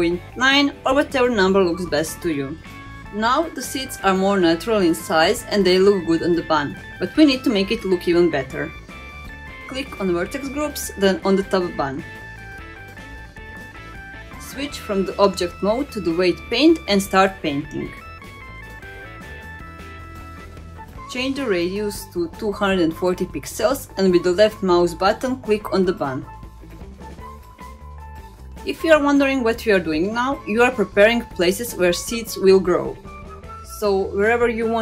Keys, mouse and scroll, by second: 3.0 click, 3.4-4.6 middle drag, 5.3-6.1 scroll down 5, 6.7-7.6 scroll down 1, 7.6-10.9 scroll down 3, 11.0 click, 11.6-12.9 scroll down 4, 12.9 scroll down 1, 13.2 click, 14.0 middle click, 15.2-18.9 drag, 19.3 middle click, 22.9-24.3 drag, 25.3-26.7 drag, 27.6 click, 28.6 middle click, 29.8-34.8 drag.